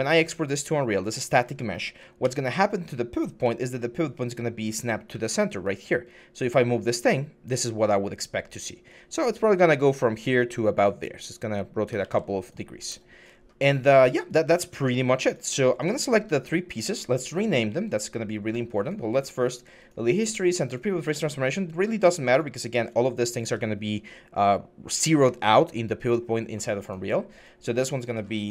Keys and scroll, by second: 0.5 4, 2.0 d, 3.2-4.9 typing, 11.8 ctrl+z, 13.2 6.